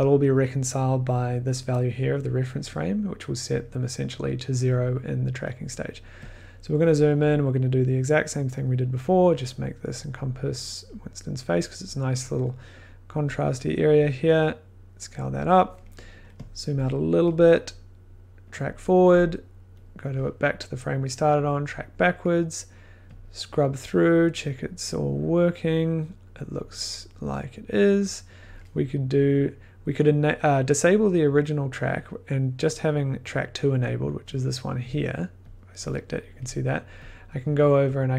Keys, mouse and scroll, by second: 3.5 click, 5.7 click, 5.8 scroll, 6.8 middle click, 8.3 click, 10.8 click, 13.2 click, 16.7 scroll, 17.0 middle click, 18.5 click, 28.4-31.1 drag, 35.5 click, 37.9 click.